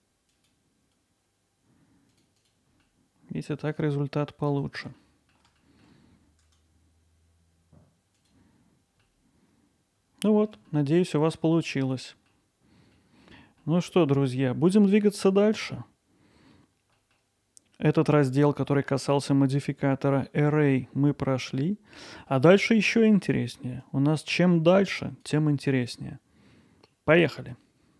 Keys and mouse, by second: 2.4 click, 2.9-4.6 alt+middle drag, 5.0-5.3 ctrl+alt+middle drag, 6.5-9.0 right drag, 9.1-10.5 alt+middle drag, 12.1 middle click, 13.0 middle click, 13.7 alt+middle click, 14.1 middle drag, 14.7 alt+middle click, 15.2 middle drag, 17.1 middle drag, 18.2-22.0 drag, 22.0-22.3 middle drag, 23.0-23.3 middle drag, 23.9-26.9 drag.